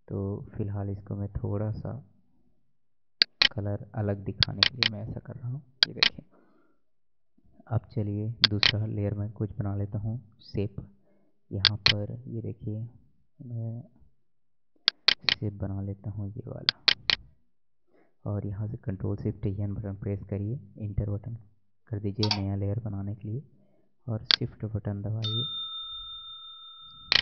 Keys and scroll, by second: 19.1 ctrl+shift+n.